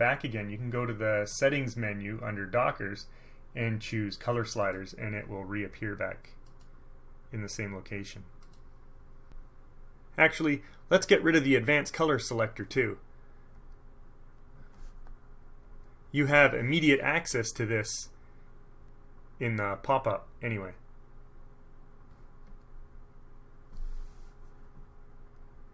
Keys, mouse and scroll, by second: 1.5 click, 4.8 click, 6.6 click, 8.6 click, 13.7 scroll up 1, 13.8 click, 15.8 click, 20.3 right click, 22.6 click, 25.3 click.